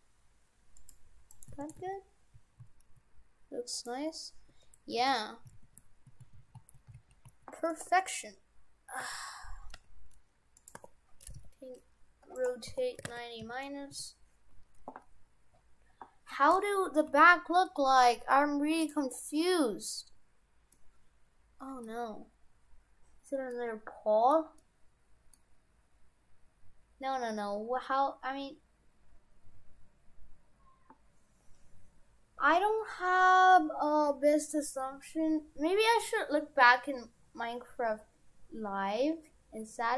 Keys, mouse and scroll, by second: 1.3 right click, 1.5 shift+f, 4.6 Tab, 5.1 shift+f, 7.9 Tab, 8.3 right click, 8.6-10.7 scroll down 5, 9.0 a, 9.8 g, 10.8 r, 12.5 w, 12.7 r, 17.1 g, 19.2-20.1 scroll up 4, 20.1-20.7 scroll down 1, 20.7 middle click, 23.1 w, 23.5 middle click, 24.6 middle click, 26.7-27.3 scroll down 1, 27.3-27.7 scroll up 1.